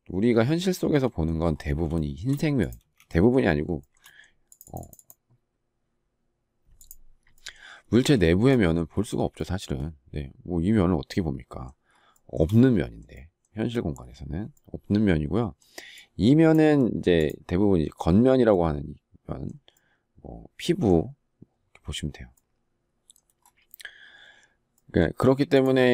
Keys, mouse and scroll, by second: 1.9 shift+middle click, 2.7 space, 3.7 shift+middle click, 11.9 shift+middle click.